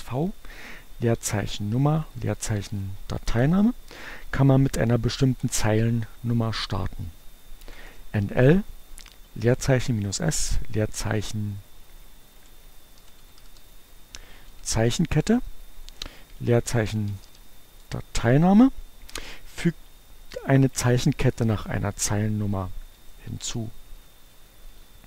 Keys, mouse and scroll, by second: 0.0-3.3 typing, 7.4-9.6 typing, 10.6 space, 12.0-14.6 typing, 16.2-17.9 typing, 22.4 Up, 22.6 Left, 23.3 Left, 24.2 Right, 24.4 shift+2, 24.9 shift+Right.